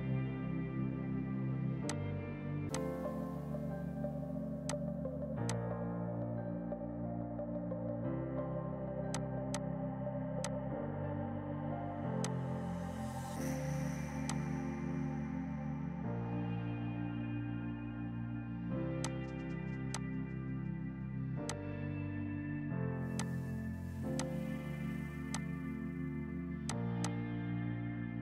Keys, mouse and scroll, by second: 6.7 shift+Page_Down, 9.2 click, 11.3 F6, 12.3 click, 13.9 space, 14.3 click, 19.1 click, 19.3 right click, 20.0 click, 21.5 shift+click, 22.2 shift+Page_Down, 23.2 shift+click.